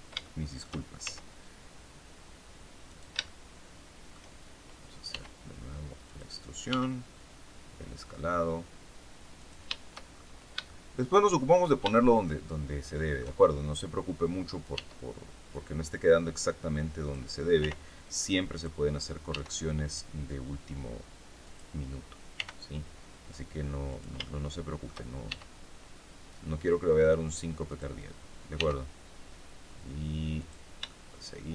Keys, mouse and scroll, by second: 0.2 shift+middle click, 1.0 shift+s, 2.8 shift+click, 3.2-4.2 shift+middle drag, 5.0 e, 6.0 click, 6.6 s, 9.3 shift+click, 10.0-10.6 shift+scroll down 1, 10.6-11.6 shift+middle drag, 11.8-13.3 shift+middle drag, 14.6 e, 16.9 click, 17.5 r, 18.4 click, 19.2 e, 21.4 click, 22.3 r, 23.8 shift+click, 24.2 shift+middle click, 25.2 shift+e, 27.6 click, 28.5 r, 30.3 click, 30.8 shift+middle click.